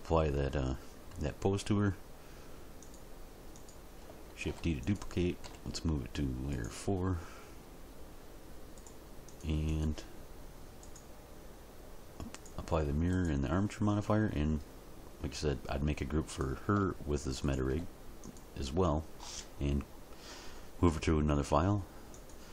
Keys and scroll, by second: 4.4 shift+d, 5.4 m.